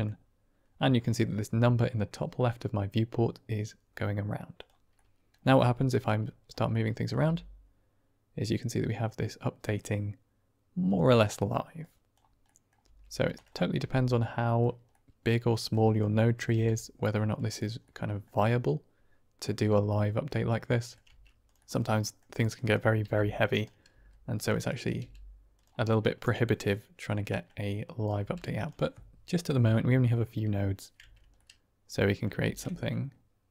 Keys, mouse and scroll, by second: 4.5 click, 4.9 middle click, 5.4 Tab, 6.2 click, 6.6 middle click, 7.1 g, 11.2 middle click, 11.7 click, 12.4 middle click, 12.8 g, 13.7 r, 14.9 middle click, 15.9 click, 16.5 g, 17.8 middle click, 19.9-20.9 middle drag, 21.0 Tab, 21.4 click, 21.6 Tab, 21.6 middle click, 22.5 click, 23.0 g, 23.9 s, 24.6 click, 25.0 g, 25.8-27.4 middle drag, 27.8 click, 28.2 g, 29.5-30.8 middle drag, 30.9 Tab, 31.3-32.2 middle drag, 32.3 shift+space, 32.7-33.5 middle drag.